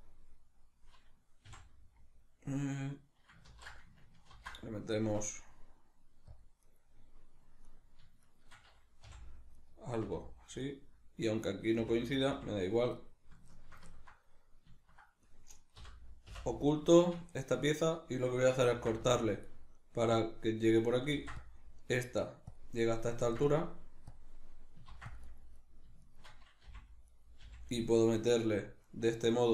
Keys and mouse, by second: 1.5 f, 6.8 right click, 7.7 right click, 8.3 shift+right click, 9.1 f, 9.6 right click, 10.1 f, 10.6 right click, 11.5 right click, 11.8 f, 13.0-15.3 shift+middle drag, 15.3 right click, 15.8 l, 17.0-20.3 shift+middle drag, 18.7 ctrl+r, 20.3 click, 21.1 ctrl+r, 22.6 click, 23.3 ctrl+r, 24.2 click, 24.9 ctrl+r, 25.6 right click, 26.0 shift+right click, 26.6 f, 27.0 right click, 27.4 f, 28.8 right click.